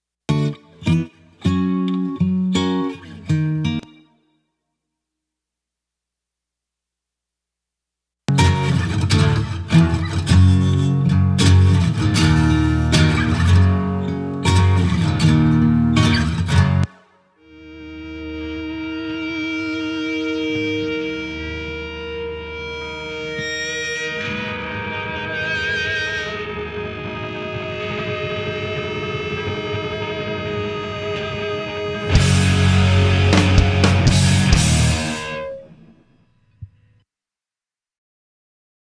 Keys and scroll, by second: 3.6 space, 8.0 space, 16.6 space.